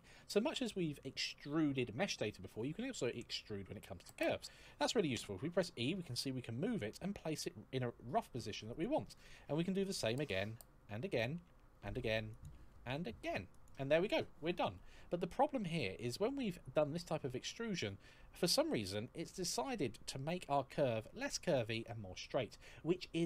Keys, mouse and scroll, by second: 4.9 e, 8.5 click, 9.1 e, 9.8 click, 10.1 e, 15.2-15.6 scroll down 1, 15.6-16.3 scroll up 1, 18.1 click.